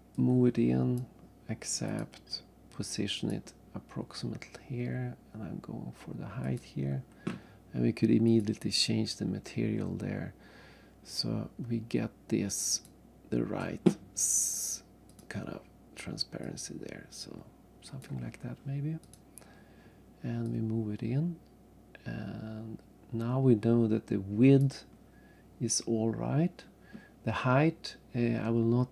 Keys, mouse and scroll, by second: 0.1 click, 1.9 click, 2.0 click, 3.1 click, 3.3 click, 6.4 click, 8.3 click, 12.7 click, 15.1 click, 16.4 click, 19.0 click, 20.5 click, 25.5-26.0 scroll up 2.